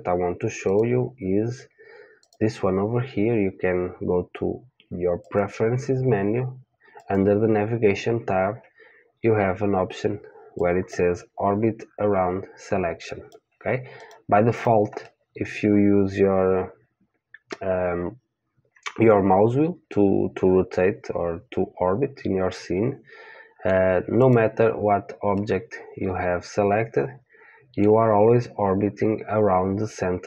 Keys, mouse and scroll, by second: 0.7-5.4 drag, 14.5 click, 15.0-17.0 middle drag, 24.2 click, 25.3-27.3 middle drag.